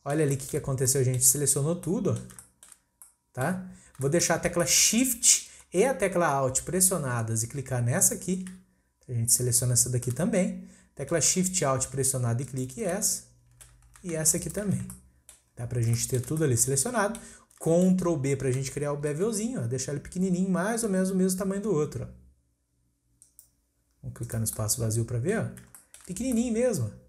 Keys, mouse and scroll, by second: 0.7 scroll up 1, 0.8-2.8 middle drag, 2.8 scroll down 1, 3.0-3.5 middle drag, 3.5-4.0 scroll up 1, 4.0-4.5 shift+middle drag, 4.5 scroll up 1, 4.6-7.8 middle drag, 8.0 alt+shift+click, 8.6-9.3 scroll down 1, 9.3-9.8 scroll down 1, 9.8 scroll down 1, 10.1-12.5 middle drag, 12.5 alt+shift+click, 13.1-14.4 shift+middle drag, 14.4 alt+shift+click, 14.9-15.6 middle drag, 15.6-16.0 scroll up 1, 16.0 shift+middle click, 16.2 shift+scroll up 1, 16.4-17.4 middle drag, 17.4 scroll up 1, 17.6 shift+middle click, 18.0-19.0 scroll up 1, 19.0 ctrl+b, 23.8-24.2 scroll down 2, 24.2 click, 24.6-27.0 middle drag.